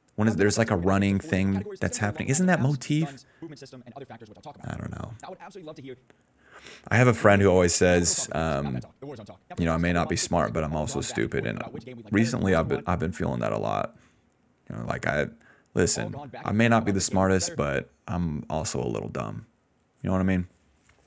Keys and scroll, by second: 0.7 s, 4.7 space, 5.1 space, 5.9 space, 6.9 ctrl+s, 7.1 space, 7.4 d, 11.2 d, 11.6 s, 12.7 space, 13.5 d, 15.6 space, 17.6 space.